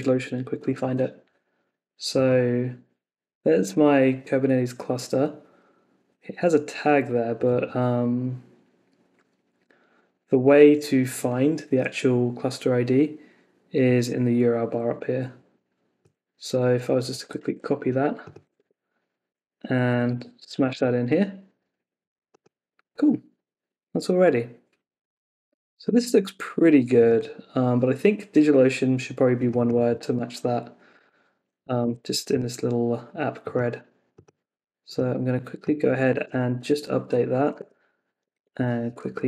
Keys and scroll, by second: 0.0 super+Tab, 17.2 super+c, 18.5 super+Tab, 20.1 super+v, 20.7 super+s, 36.2 super+s, 37.5 super+Tab.